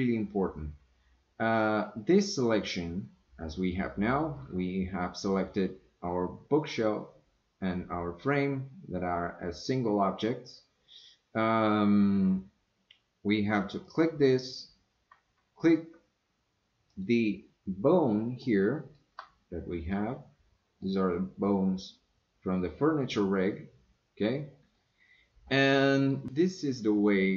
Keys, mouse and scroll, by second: 5.4 click, 13.8 click, 16.9 shift+click, 18.4-19.0 shift+middle drag, 20.0-20.9 middle drag, 24.7-26.1 middle drag.